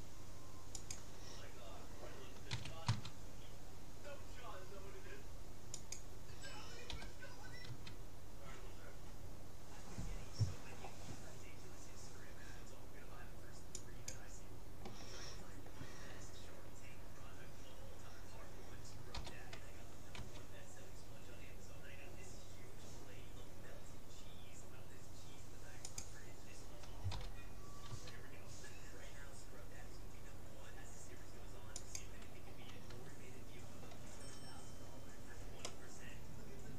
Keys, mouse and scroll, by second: 2.5 s, 6.9 g, 19.1 g, 27.1 g, 34.4-36.7 middle drag.